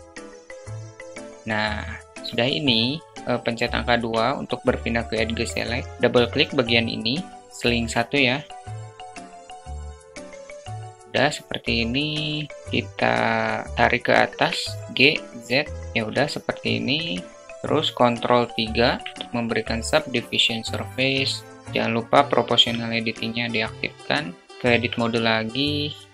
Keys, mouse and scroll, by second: 3.2 2, 8.0 shift+click, 8.7 shift+click, 9.4 shift+click, 9.9 middle click, 10.7 alt+middle click, 13.6 g, 16.1-16.5 alt+middle drag, 17.4 Tab, 17.4 ctrl+3, 18.4-18.9 middle drag, 21.8 click, 24.0 Tab, 25.9 middle drag.